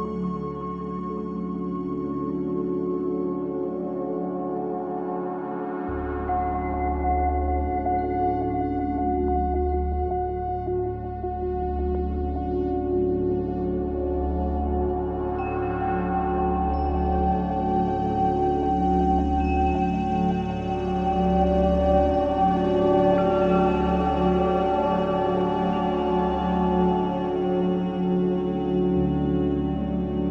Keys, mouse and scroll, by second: 0.6-3.0 drag, 3.0-9.8 right drag, 9.8-16.7 drag, 17.9-22.1 drag, 23.0 ctrl+click, 25.4 shift+d, 28.0 click.